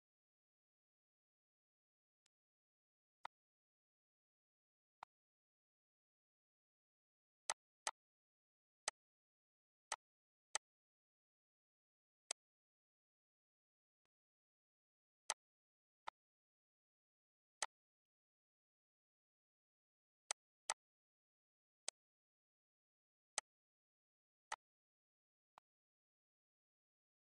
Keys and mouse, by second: 2.4 click, 3.5 click, 5.3 click, 7.7 click, 9.1 click, 10.1 click, 10.8 click, 12.5 click, 14.2 click, 15.5 click, 16.3 click, 17.9 click, 19.0 ctrl+g, 20.5 click, 20.9 click, 22.1 click, 23.6 click, 24.7 click.